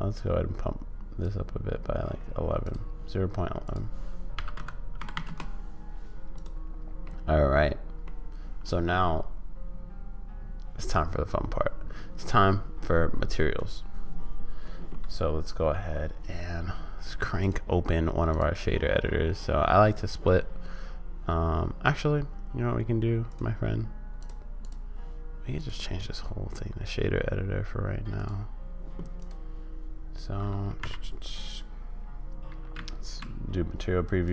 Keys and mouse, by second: 3.6-5.9 drag, 5.1 1, 7.1 middle click, 17.5-20.1 drag, 23.3-24.7 drag, 25.6-28.3 drag, 30.8 n, 32.7 z, 34.2 click.